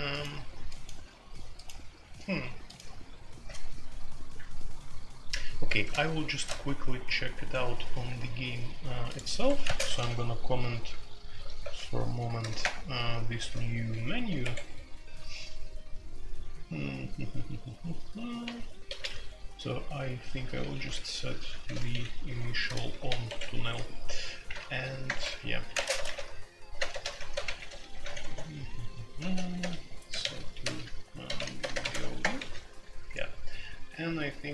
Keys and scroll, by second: 6.3 shift+c, 9.3 Escape, 9.6 space, 9.8 f, 10.0 f, 11.3 m, 11.6 e, 12.4 ctrl+n, 12.6 Return, 13.5-15.6 typing, 14.4 Escape, 17.8-32.4 typing, 28.2 Tab.